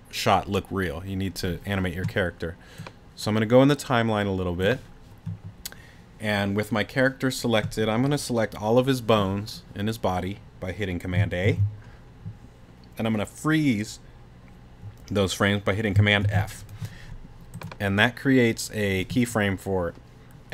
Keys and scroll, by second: 11.4 super+a, 16.2 super+f.